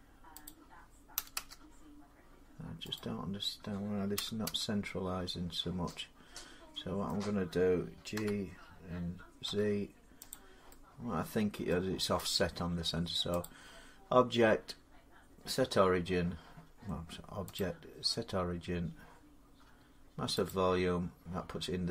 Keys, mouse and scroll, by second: 1.0 0, 2.8 click, 4.0 0, 5.6 Return, 6.9 middle click, 8.0 g, 9.3 z, 10.1 click, 11.5 middle click, 13.2 click, 17.2-21.5 drag.